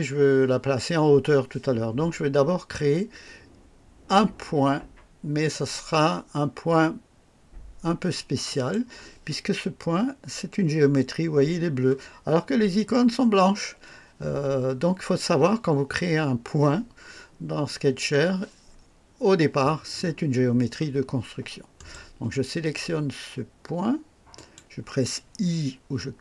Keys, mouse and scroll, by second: 5.5 click, 8.5 click, 21.8 right click, 24.3 click.